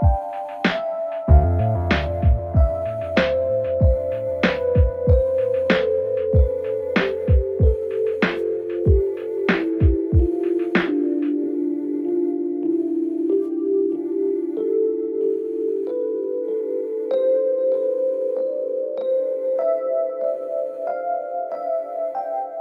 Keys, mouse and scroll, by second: 2.0 Return, 4.9 Left, 5.4 space, 6.3 End, 6.8 Return, 10.3 click, 10.7 alt+scroll down 1, 11.6 alt+scroll up 1, 11.9 space, 11.9-12.3 click, 12.2 space, 12.4 alt+scroll up 1, 12.6 space, 12.7-13.1 click, 12.9 space, 13.4-14.3 drag, 19.2 Home, 19.5 shift+Page_Down, 20.4 Home, 20.6 shift+End, 21.8 click.